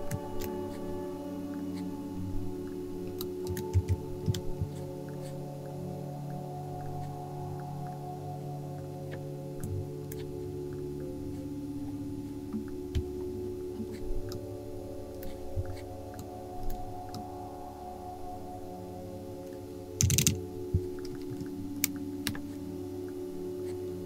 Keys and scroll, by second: 3.2-4.8 typing, 20.0 shift+Down, 20.1 shift+Down, 20.2 shift+Down, 20.2 shift+Down, 21.1 space, 21.4 space.